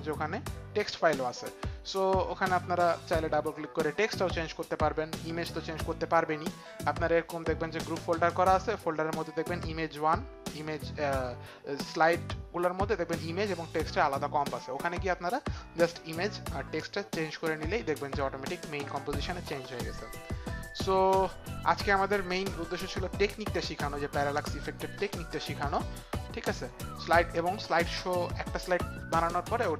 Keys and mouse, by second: 20.7 click, 24.9 click.